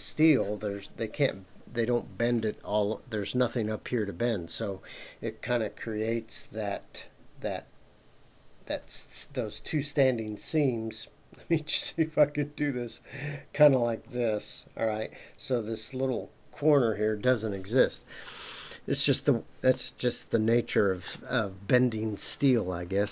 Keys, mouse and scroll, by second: 18.7-19.7 scroll down 2, 19.7-21.1 middle drag, 22.2-22.7 scroll up 2.